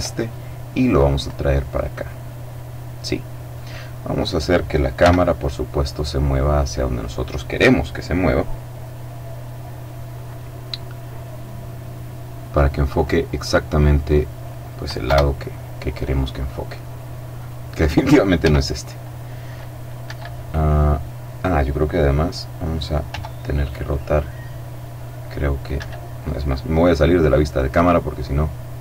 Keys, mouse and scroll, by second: 0.0-1.4 drag, 3.8 right click, 4.6 g, 6.3 click, 11.1-13.2 drag, 13.4-14.6 drag, 14.7 KP_0, 17.1 right click, 18.1 g, 19.7 Escape, 22.7 r, 25.4 Escape, 26.3-28.3 middle drag.